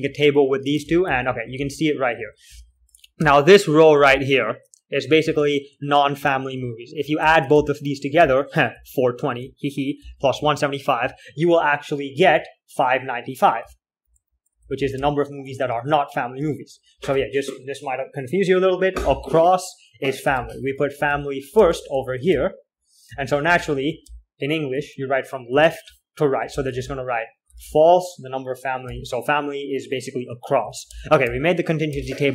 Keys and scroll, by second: 0.0-4.9 typing, 6.3-11.2 typing, 12.8 k, 14.0-30.5 typing, 31.3 ctrl+h, 31.6-32.3 typing.